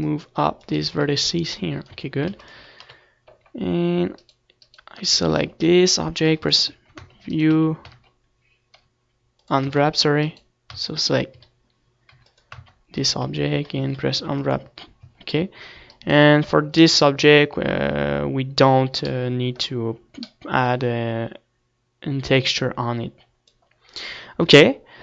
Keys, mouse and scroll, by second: 1.9 right click, 2.0 z, 2.9 Tab, 3.3 ctrl+s, 3.6 click, 3.8 KP_7, 4.3-7.3 middle drag, 6.4 Tab, 7.3 u, 8.0 Tab, 8.5-9.9 right drag, 8.9 Tab, 9.8 u, 10.6 Tab, 11.4 right click, 11.7 u, 11.7 a, 13.3 Tab, 14.1-15.7 right drag, 14.3 Tab, 15.1 u, 16.1 Tab, 17.1-18.1 middle drag, 18.1 click, 18.2 middle click, 18.4 click, 20.0-21.4 middle drag, 23.5 click, 24.3 KP_1.